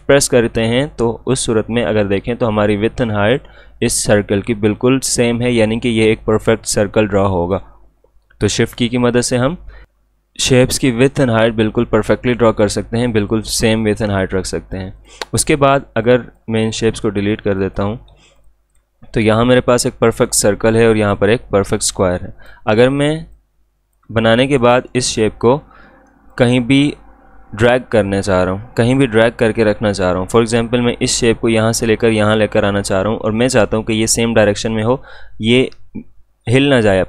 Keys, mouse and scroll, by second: 0.1-9.1 shift+drag, 13.3-24.6 drag, 30.4 click.